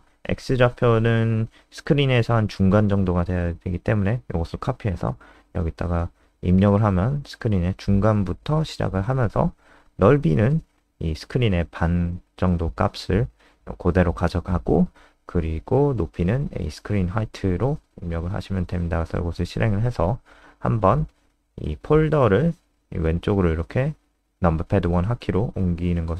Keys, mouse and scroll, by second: 1.5 ctrl+c, 2.2 click, 2.7 \, 2.7 BackSpace, 3.2 BackSpace, 3.5 ctrl+v, 14.5 click, 17.4 ctrl+s, 17.7 F5, 19.7 F3, 21.0 click, 22.5 KP_1.